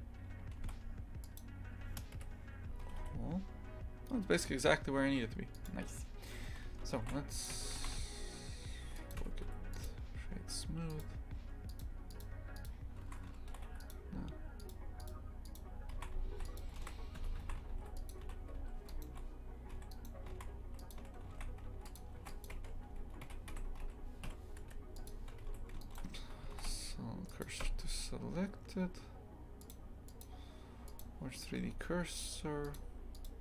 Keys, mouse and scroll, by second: 1.4 shift+s, 2.1 KP_3, 2.9 g, 6.5 shift+f, 7.5 Tab, 7.8 shift+f, 9.2 Tab, 9.8 w, 12.1-13.0 drag, 13.0 shift+f, 17.2 Tab, 17.4 shift+f, 18.2 a, 18.6 2, 18.9 right click, 19.7 3, 19.9 right click, 20.3 shift+f, 21.0 a, 21.3 shift+f, 22.2 ctrl+r, 23.2 v, 25.1 Delete, 25.8-27.4 alt+shift+right drag, 27.4 shift+s, 27.6 Tab, 31.0-31.6 drag, 31.6 Tab.